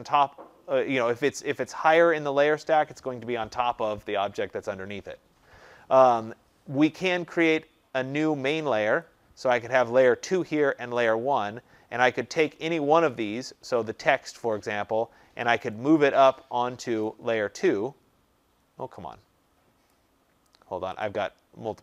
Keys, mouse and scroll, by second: 7.5 click, 9.0 click, 13.1 click, 17.0 click, 19.8 click.